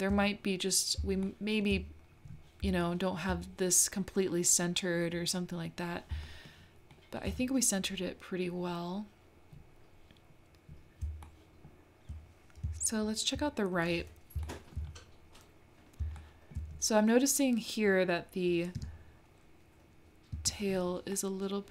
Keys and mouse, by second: 1.2 shift+click, 2.9 shift+middle click, 6.2 shift+middle click, 7.0 shift+middle click, 11.3 shift+middle click, 14.4-15.8 shift+middle drag, 16.2 shift+middle click, 18.8 Tab, 20.3 Tab, 21.2 middle click.